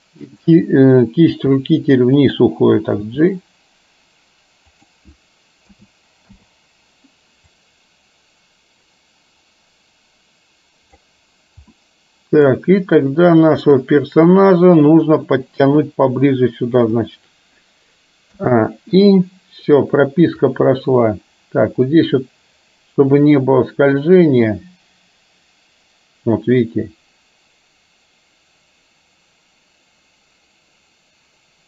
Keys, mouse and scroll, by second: 0.3 click, 1.5 r, 3.1 g, 5.7 a, 6.3 i, 7.6-11.1 drag, 11.8-12.6 middle drag, 13.6 click, 15.7 g, 18.3 a, 19.0 i, 20.6-31.6 drag.